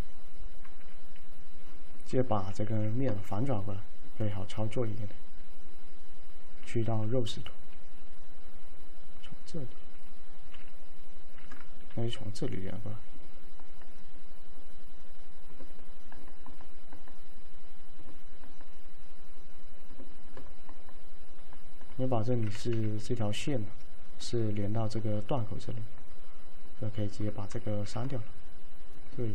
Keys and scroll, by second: 2.7 ctrl+a, 10.6 y, 12.0 alt+c, 22.8 2, 27.9 ctrl+x.